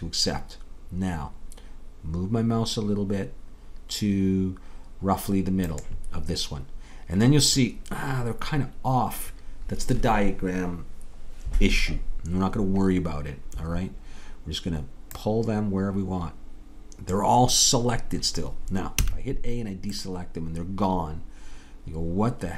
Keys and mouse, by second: 15.2-17.1 drag, 19.0 a.